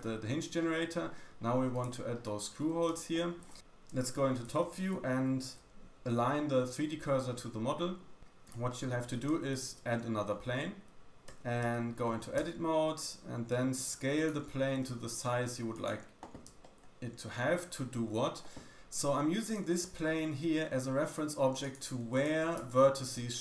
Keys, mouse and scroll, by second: 0.1-1.0 scroll down 3, 0.5 middle click, 1.8-2.2 shift+middle drag, 2.9-3.5 shift+middle drag, 4.4 shift+middle click, 4.6 shift+s, 8.6-9.1 shift+middle drag, 9.2-9.5 scroll up 2, 9.6 shift+a, 10.9 g, 11.6 Tab, 12.3 s, 14.2-16.4 drag, 14.7 g, 16.4 shift+middle click, 16.7-17.4 scroll up 3, 19.4 click, 19.4 middle click, 19.4 right click, 20.0 g, 22.1 click, 22.1 middle click, 22.1 right click, 22.4 g.